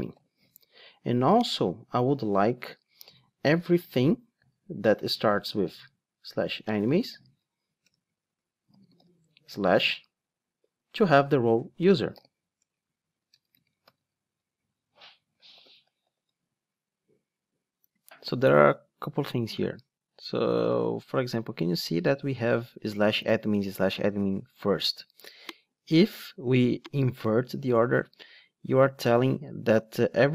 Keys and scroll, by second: 2.2 Tab, 4.4 Return, 12.6 Return, 27.0 alt+shift+Down.